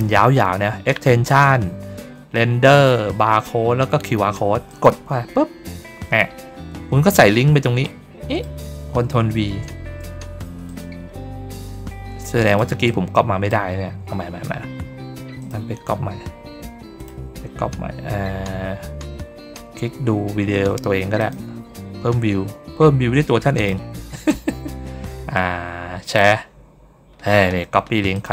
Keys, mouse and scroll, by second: 4.6 click, 7.7 click, 10.6 click, 12.3 click, 12.7 click, 15.3 click, 16.9 click, 21.1 click, 23.4 click, 24.1 middle click, 25.9 click, 28.0 click.